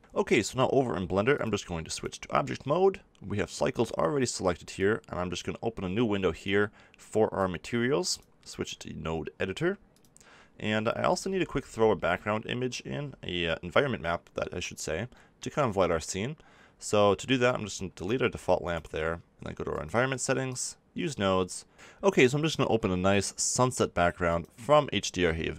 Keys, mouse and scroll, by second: 1.3-5.3 drag, 6.6 click, 12.3 m, 12.3 n, 12.3 t, 13.0 n, 17.9 click, 18.3 x.